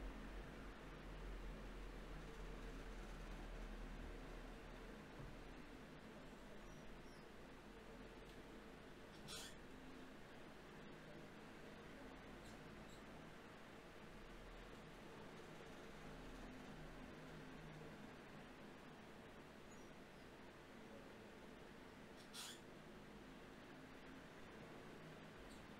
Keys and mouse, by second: 1.4 g, 2.6 g, 2.8-4.7 drag, 3.4 g, 13.5 Tab, 15.3-18.4 drag, 17.6 Tab, 18.0 Tab, 18.9-22.1 drag, 22.1 ctrl+z.